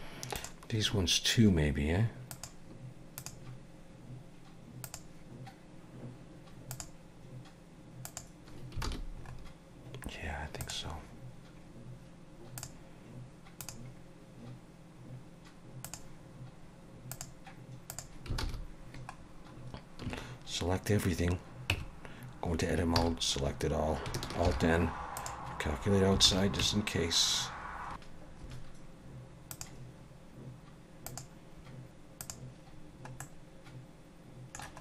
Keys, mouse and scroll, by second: 0.4 click, 2.3 click, 3.2 click, 6.7 click, 8.1 click, 8.9 alt+a, 9.3-10.2 scroll up 3, 10.2-10.6 scroll down 2, 10.6 click, 12.6 click, 13.6 click, 17.1 click, 17.9 click, 18.4 alt+a, 19.2-20.1 scroll down 3, 20.1 a, 21.7 Tab, 23.0 a, 24.5 alt+n, 26.3 alt+a, 26.7 Tab, 27.7-28.0 scroll up 2, 28.3 scroll down 1, 29.5 click, 33.2 middle click.